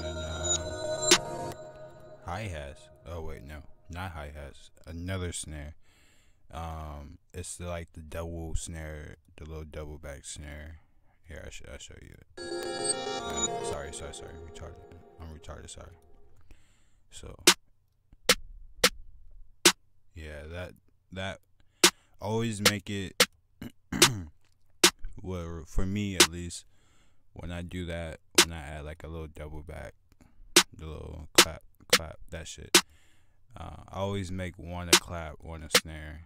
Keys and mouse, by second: 0.6 F1, 9.9 click, 11.3 click, 11.7 click, 12.6 click, 13.1 click, 15.0 click, 15.6 click, 22.3 click, 34.6 F1, 35.9 F1.